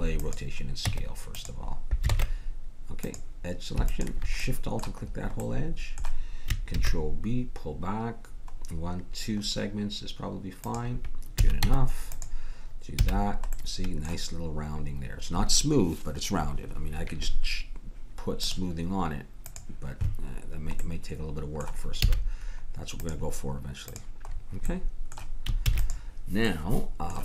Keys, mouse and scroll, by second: 0.3 ctrl+a, 0.8 Tab, 2.1 ctrl+Tab, 3.9-5.9 drag, 6.7 ctrl+b, 11.4 a, 11.6 Tab, 13.0 a, 18.4-21.2 drag, 20.8 middle click, 22.1 a, 23.0-27.2 drag, 25.7 ctrl+s.